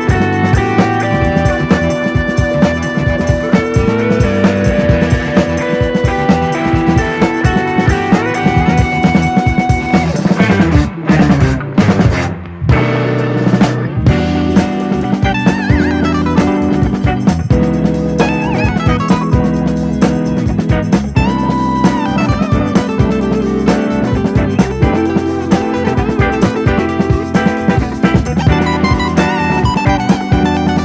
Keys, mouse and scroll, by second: 0.0 scroll up 2, 0.1 middle click, 0.5 scroll up 1, 0.8 click, 1.5 l, 1.8 click, 2.3 scroll down 2, 2.5 middle click, 3.2 click, 3.8 l, 4.1 middle click, 4.4 click, 5.2 click, 5.4 scroll down 3, 5.5 middle click, 5.8 Tab, 6.1 /, 6.5-6.8 drag, 6.8-7.1 scroll down 1, 7.1-7.6 shift+middle drag, 7.6 scroll up 1, 7.7-8.1 shift+middle drag, 8.1 click, 8.5 KP_3, 8.9 scroll down 2, 9.1 shift+middle click, 9.8 click, 10.9 click, 11.1 scroll up 1, 11.2 shift+middle click, 11.7 shift+d, 12.6-13.6 drag, 14.1-15.1 drag, 15.6-15.9 scroll up 1, 15.9 click, 16.9 Tab, 17.6 a, 18.1 s, 19.2 scroll down 1, 19.4 middle click, 20.0 Tab, 20.1 click, 21.1-22.8 shift+middle drag, 24.3-25.3 drag, 25.7-26.7 drag, 26.7-27.3 scroll down 2, 27.3-28.3 drag, 28.5 Tab, 28.8 KP_1, 29.2 s, 30.3 Tab, 30.6 g.